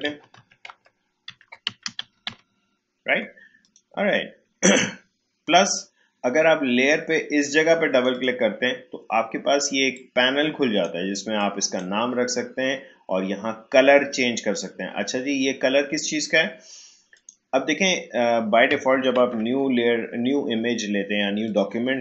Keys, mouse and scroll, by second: 0.0-2.7 typing, 3.6 click, 7.9-14.3 drag, 17.1 click, 19.2 ctrl+n, 21.5-22.0 drag.